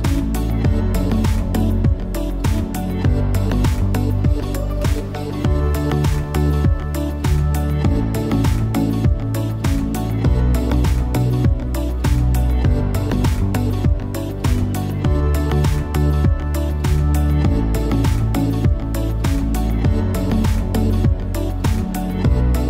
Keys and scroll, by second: 13.0 v.